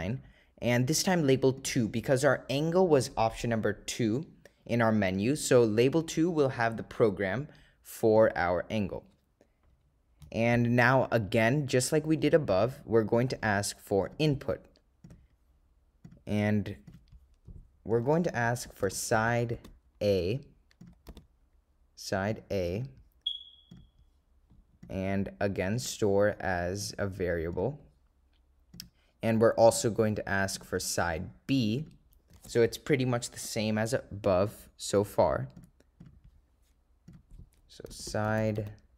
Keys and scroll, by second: 0.0 9, 1.7 2, 8.2 Return, 14.2 Right, 15.2 Return, 20.9 0, 22.5 ., 23.8 0, 25.8 ,, 28.8 Return, 30.6 Right, 31.9 Return.